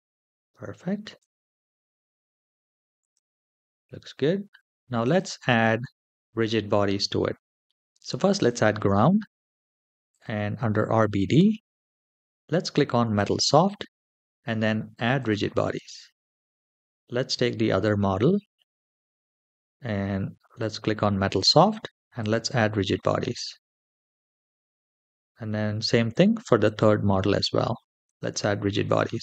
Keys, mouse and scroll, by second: 1.0 click, 2.8 click, 3.5 shift+middle click, 4.9 click, 8.1 click, 9.9 click, 11.6-12.8 scroll down 2, 12.8-14.7 drag, 14.9 click, 17.1 click, 20.3 click, 22.0 click, 23.1 click, 24.8 click, 26.4 click, 27.8 click.